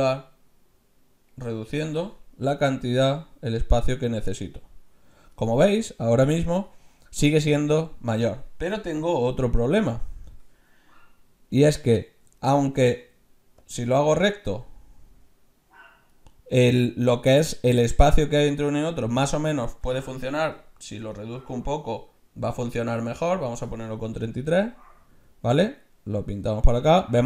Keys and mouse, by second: 0.0-1.9 drag, 2.6-4.4 drag, 9.2 z, 12.4 middle click, 13.1 ctrl+z, 13.6-15.5 drag, 19.9 ctrl+z, 20.6-22.4 drag, 24.3-26.0 drag.